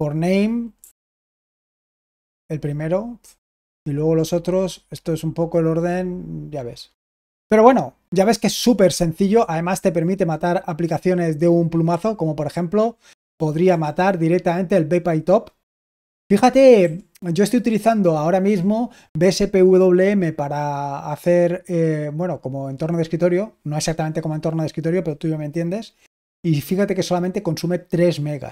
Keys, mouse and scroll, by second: 0.7-1.3 typing, 11.8 Down, 12.5-13.2 Down, 13.5 Up, 16.7 Up.